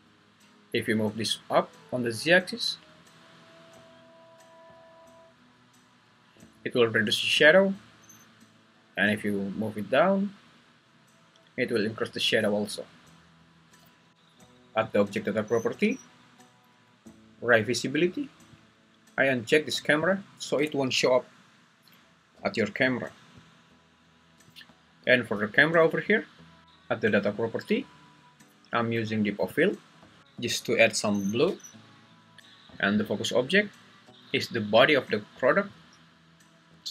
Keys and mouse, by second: 14.1 Escape, 20.0 click, 23.4 click, 25.7 click, 29.5 click.